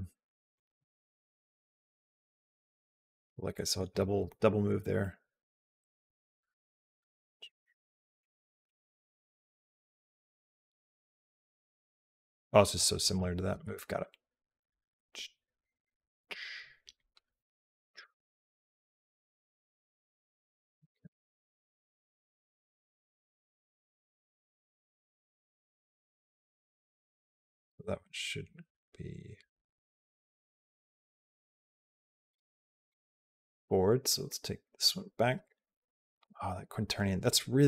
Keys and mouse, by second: 0.4 click, 1.1 click, 3.4 middle click, 4.4 middle click, 5.1-13.0 drag, 13.8-19.8 drag, 21.4-32.2 drag, 32.8 click, 34.0-36.0 drag.